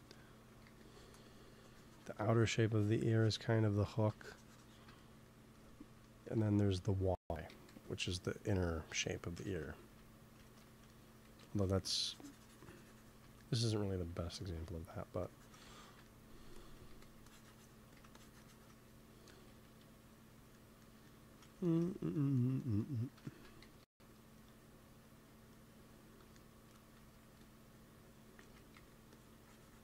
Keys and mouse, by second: 0.4 x, 0.6 f, 1.1 f, 2.1-6.0 drag, 7.4 g, 7.6 f, 8.1-9.8 drag, 9.4 ctrl+z, 9.8 ctrl+z, 10.4 ctrl+z, 11.2 x, 11.3 f, 11.5-13.0 drag, 15.1-17.1 drag, 16.8 f, 17.2 click, 17.8 f, 19.2 KP_1, 19.6 KP_3, 23.5 g, 23.7 f, 24.4-28.1 drag, 26.9 x, 27.1 f, 28.3 shift+c, 28.6 f, 29.0-29.8 drag.